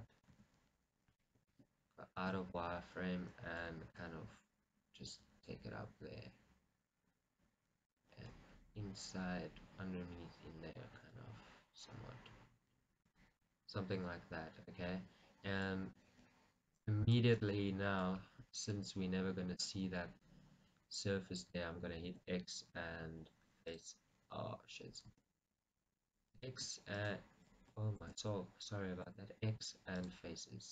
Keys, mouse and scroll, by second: 0.3 right click, 0.4 z, 1.6 Escape, 2.7-8.4 middle drag, 4.1 g, 8.4 click, 8.5 middle click, 9.9-11.1 middle drag, 11.1 g, 13.3 click, 13.5 middle click, 14.7-16.3 middle drag, 16.3 g, 17.5 click, 17.6 middle click, 18.3-20.2 shift+middle drag, 18.3 scroll, 20.1 scroll, 22.2 x, 25.4 ctrl+z, 26.5 x, 28.3 ctrl+z, 29.1 x.